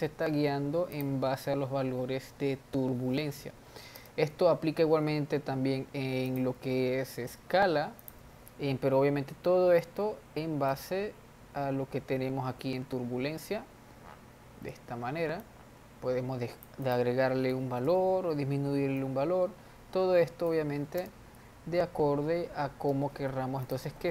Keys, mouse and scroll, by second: 1.2 drag, 4.4 space, 5.2 r, 7.1 ctrl+z, 7.4 s, 10.9-14.1 drag, 18.3-21.3 drag, 21.3 space, 24.0-24.1 drag.